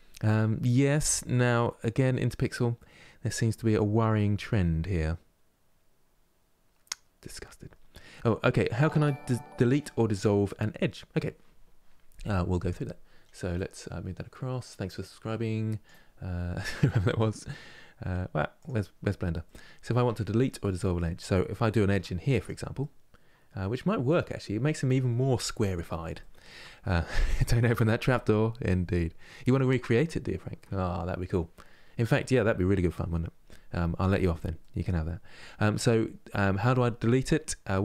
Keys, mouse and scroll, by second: 19.1 middle click, 19.6 Tab, 20.1-20.4 scroll up 1, 20.4-21.5 middle drag, 21.5 ctrl+r, 22.5-25.5 middle drag, 25.9-29.6 shift+middle drag, 34.3-37.8 middle drag.